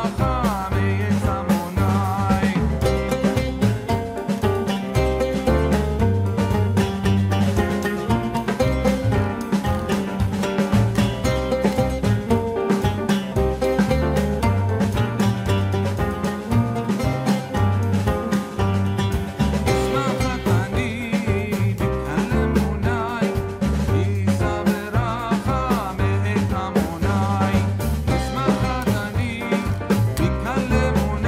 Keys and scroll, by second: 6.3 ctrl+z.